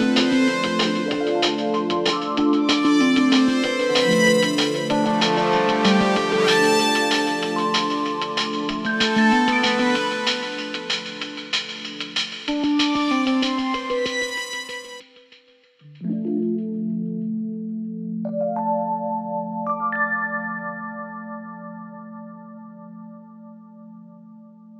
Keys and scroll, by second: 6.6 Escape, 15.2 ctrl+v, 15.8 Escape, 22.1 Escape, 23.8 Escape.